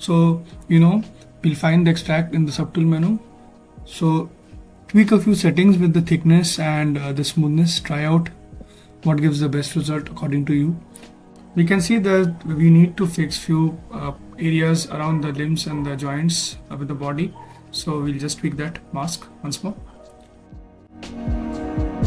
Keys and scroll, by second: 5.1 ., 5.2 0, 5.7 5, 6.8 Return, 9.5 5, 9.7 0, 10.3 Return.